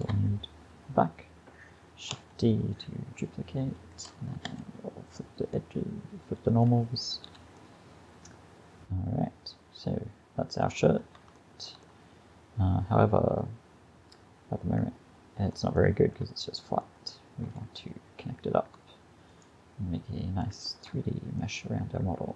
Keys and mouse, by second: 4.5 ctrl+f, 5.6 click, 6.0 click, 7.3 a, 9.5 middle click, 11.0 middle click, 12.3 middle click, 12.8 middle click, 13.7-15.8 middle drag, 19.3-22.3 drag.